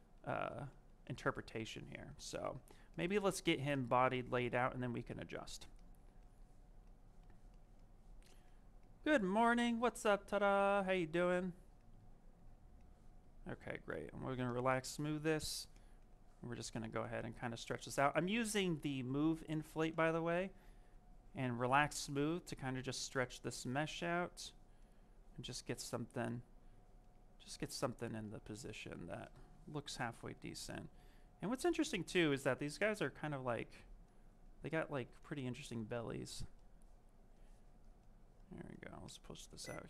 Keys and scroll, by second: 4.5 s.